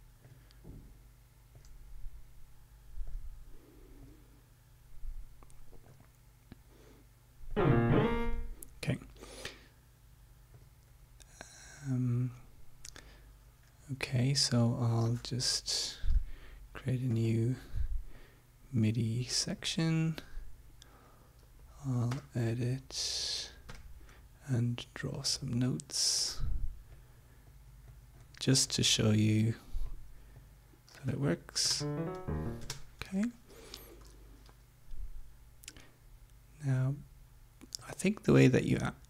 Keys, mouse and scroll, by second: 0.2 click, 1.5 click, 3.1 click, 4.0 click, 6.0 click, 7.5 click, 10.5 click, 15.7 Home, 17.0 click, 18.0-19.8 drag, 22.0 e, 23.6 d, 24.8 click, 25.7 click, 26.4-28.5 drag, 28.6-29.6 drag, 29.9 click, 30.3 click, 31.6 space, 32.6 space, 33.9 Home, 37.8-39.0 drag.